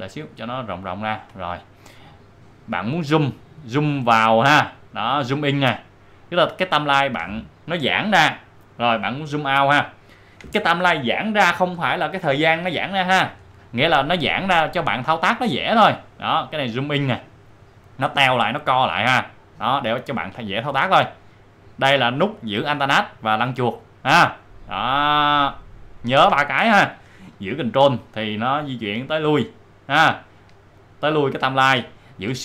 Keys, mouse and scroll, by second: 0.1-0.6 alt+scroll up 2, 2.1-2.8 shift+scroll up 2, 9.6 alt+scroll up 1, 9.8-10.5 alt+scroll down 1, 14.2 alt+scroll down 1, 17.4 alt+scroll down 1, 19.8-20.5 alt+scroll up 1, 22.8-23.2 alt+scroll up 1, 27.4-28.0 alt+scroll up 2, 28.1-28.8 ctrl+scroll down 1, 29.4 ctrl+scroll down 1.